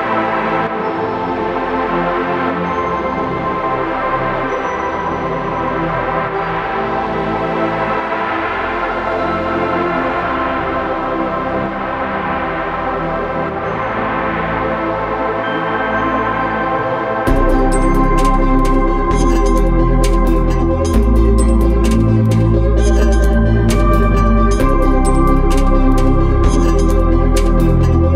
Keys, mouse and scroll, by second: 3.1 click, 8.2 click, 11.9 click, 15.3 click, 18.2 click, 22.1 click.